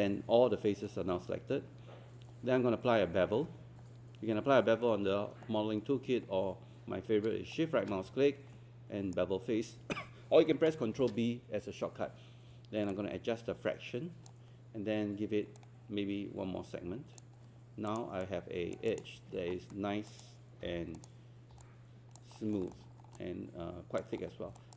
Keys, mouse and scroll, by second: 7.6-10.0 shift+right drag, 12.9-17.9 drag, 18.2 right click, 18.9-20.0 drag, 20.6 click, 21.6 alt+click, 22.4 alt+middle click, 22.7-23.2 scroll down 2, 24.2 scroll up 1, 24.6 alt+click.